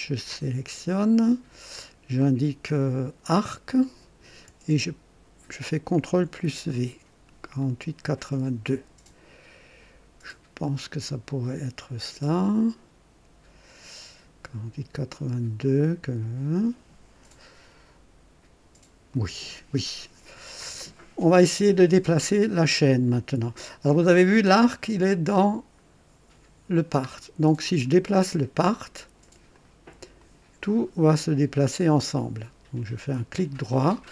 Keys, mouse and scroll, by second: 0.2 click, 2.1 click, 3.3 click, 5.9 ctrl+v, 7.6 click, 19.1 click, 22.8-23.6 right drag, 25.7-26.1 scroll up 1, 27.1-27.4 scroll down 1, 27.8 scroll up 1, 29.5 click, 30.2 click, 31.6-32.5 right drag, 33.3 click.